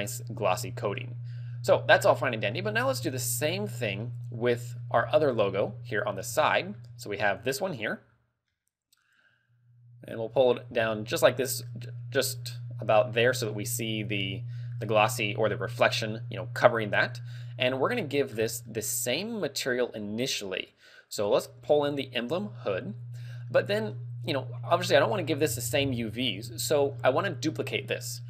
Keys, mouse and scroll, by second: 0.5-0.9 scroll down 8, 1.0 middle click, 1.7 scroll down 1, 2.2 shift+middle click, 3.2 shift+middle click, 4.2 shift+middle click, 5.2 shift+middle click, 5.6 ctrl+middle click, 6.5 shift+middle click, 7.7 right click, 8.1 scroll down 2, 8.6 middle click, 10.8-11.1 scroll up 4, 11.3 shift+middle click, 11.9-12.6 scroll down 4, 14.3 ctrl+middle click, 17.9 click, 18.3-18.7 scroll down 7, 18.7 middle click, 20.3 click, 23.7 middle click, 27.0-27.9 scroll down 4.